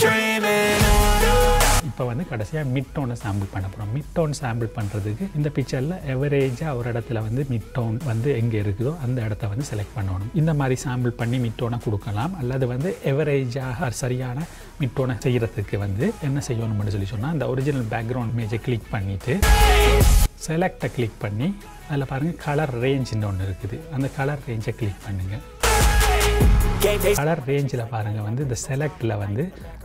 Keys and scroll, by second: 16.0 ctrl+z.